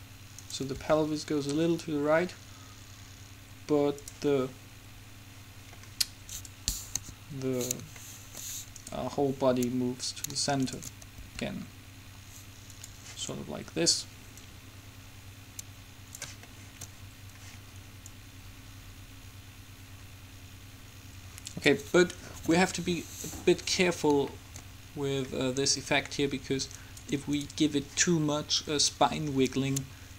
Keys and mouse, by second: 0.9 r, 7.1 KP_7, 11.3 r, 14.6-16.5 drag, 16.7-18.2 middle drag, 18.2-19.9 drag, 23.7-27.0 middle drag, 27.0-28.7 right drag, 28.9-30.1 drag.